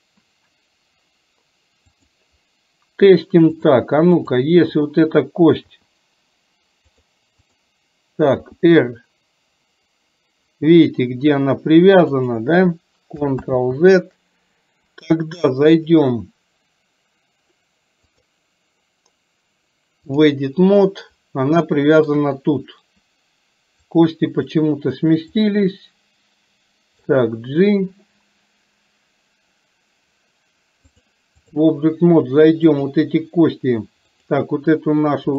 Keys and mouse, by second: 2.0 click, 3.6 click, 4.3 click, 5.8 r, 7.5 click, 8.4 r, 13.5 ctrl+z, 15.8 click, 18.1-20.4 drag, 21.8 shift+middle click, 24.0 click, 25.5-27.1 drag, 30.9 click, 34.1 click.